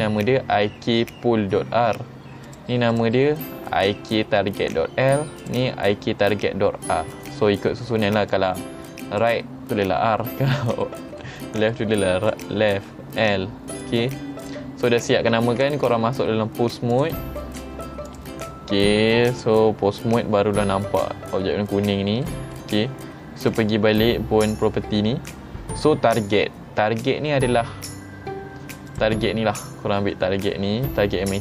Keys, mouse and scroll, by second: 2.5 click, 3.0 click, 5.5 click, 8.4 click, 10.6 middle click, 11.3 shift+middle click, 12.4 click, 12.9 middle click, 13.8 click, 14.5 click, 17.0 click, 18.1 click, 19.4 click, 22.3-23.2 middle drag, 23.6 click, 29.0 click.